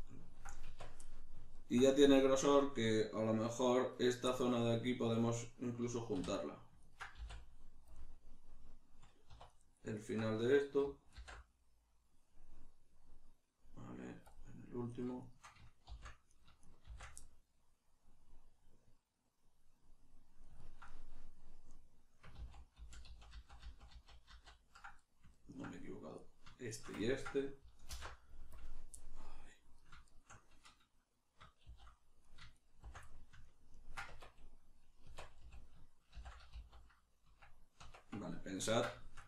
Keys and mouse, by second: 0.6 Tab, 1.0 middle click, 2.9-6.3 middle drag, 6.1 3, 6.3 right click, 6.8 ctrl+right click, 7.2 x, 9.5 right click, 10.0 ctrl+right click, 11.2 alt+m, 14.9 right click, 15.2 shift+right click, 15.9 shift+r, 16.3 right click, 16.6 shift+right click, 16.8 shift+r, 17.2-22.4 middle drag, 22.4 ctrl+z, 25.0 middle click, 26.2 right click, 26.7 shift+right click, 27.0 ctrl+middle click, 29.0 middle click, 29.8 right click, 30.0 shift+right click, 31.6 shift+r, 32.2 right click, 32.5 shift+right click, 32.8 shift+r, 33.1-38.3 middle drag, 34.1 Tab, 36.1 shift+n, 36.5 z.